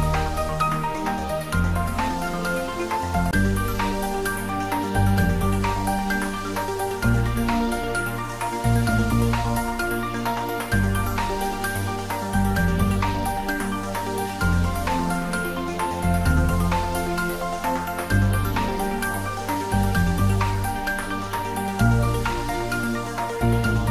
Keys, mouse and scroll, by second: 1.3 shift+d, 1.7 r, 3.4 click, 3.9 ctrl+z, 5.0 shift+click, 5.9 shift+d, 6.3 r, 10.9 click, 11.8 ctrl+z, 12.2-13.9 typing, 13.8 click, 15.1-16.0 typing, 17.1 click, 18.5-19.7 typing, 23.2 click, 23.7 scroll down 1.